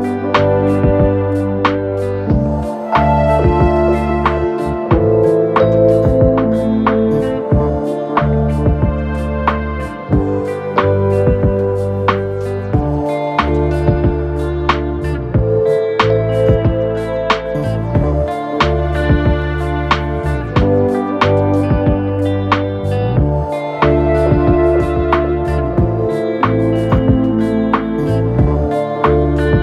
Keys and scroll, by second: 2.6 Return, 2.9 0, 3.0 Return, 3.8 0, 3.9 Return, 4.4 0, 4.7 Return, 6.7 3, 11.3 F1, 18.9 ., 23.0 2, 23.2 ].